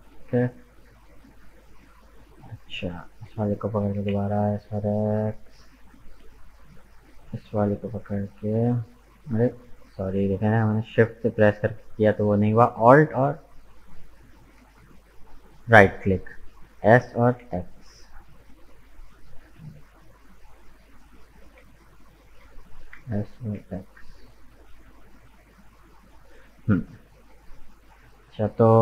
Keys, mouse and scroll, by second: 2.9 alt+right click, 3.8 s, 7.8 shift+right click, 10.5 right click, 13.8 alt+right click, 16.6 s, 22.0 alt+right click, 22.8 s.